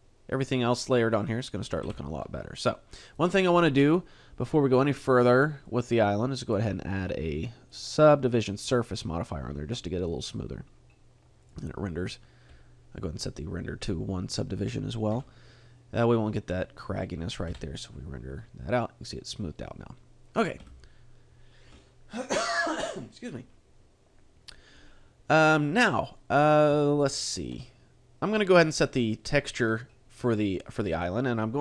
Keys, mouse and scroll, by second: 1.8 Escape, 3.2 right click, 5.6 click, 6.4 click, 7.7 click, 11.4 click, 20.6 Escape, 25.6 middle click, 26.8 shift+middle click, 27.4 a, 28.2 middle click, 29.4 shift+middle click, 30.9 right click.